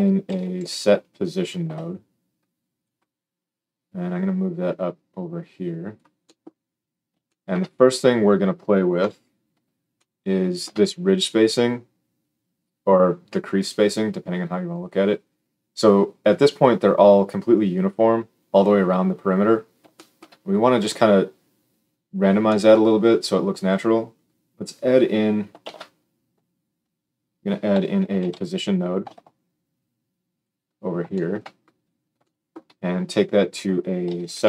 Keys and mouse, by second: 0.2 s, 3.5-30.3 drag, 8.9 KP_7, 25.6 shift+a, 30.3-33.0 middle drag, 33.0-34.4 drag.